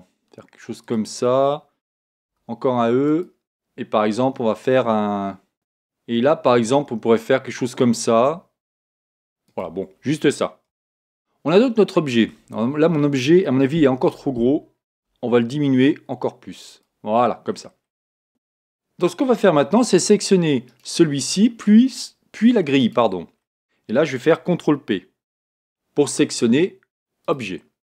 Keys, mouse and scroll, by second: 0.9 click, 2.3 e, 6.7 s, 10.0-11.2 middle drag, 10.7 Tab, 11.8-12.9 middle drag, 12.9-13.7 scroll up 1, 13.7-14.9 middle drag, 14.9 s, 15.2 middle click, 16.8 click, 17.1-19.8 middle drag, 18.4 a, 20.7-22.5 right drag, 22.8-24.5 right drag, 23.3 middle click, 23.9-25.4 middle drag, 25.3 ctrl+p, 27.8-27.9 middle drag.